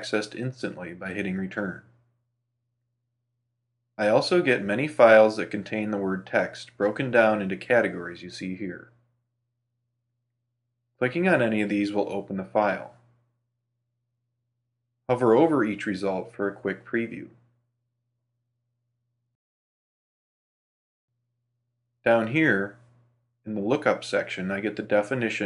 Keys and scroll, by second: 0.2 super+space.